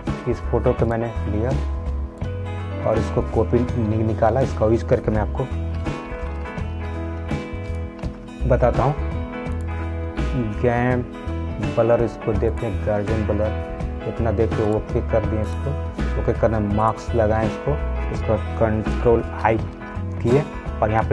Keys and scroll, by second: 19.7 ctrl+i.